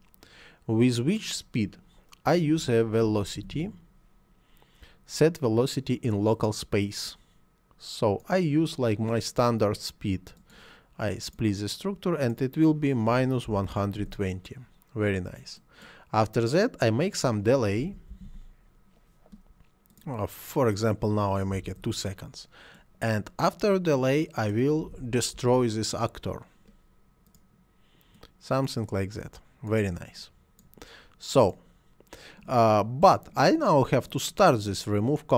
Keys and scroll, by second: 2.6 v, 3.0 e, 3.4 l, 3.5 o, 13.1 -, 13.4 1, 13.6 0, 14.0 Return, 17.8 d, 17.8 e, 18.1 l, 18.2 a, 21.5 2, 21.6 Return, 24.8 d, 24.9 e, 25.3 s.